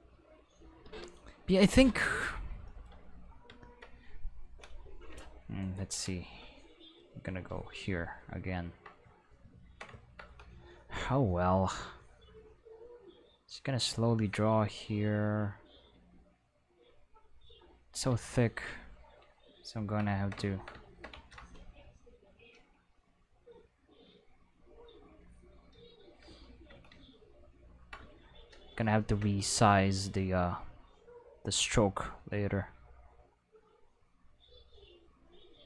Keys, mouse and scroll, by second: 0.9 Tab, 3.8-6.3 middle drag, 6.9 click, 8.5 ctrl+middle click, 11.8-13.7 drag, 14.7 click, 15.6 click, 15.7 click, 17.0 click, 18.2 ctrl+middle click, 22.2 click, 23.4-25.9 drag, 27.0 ctrl+middle click, 27.4 ctrl+middle click, 30.9 click, 31.7 click, 33.0 click, 34.2 click, 35.3 click.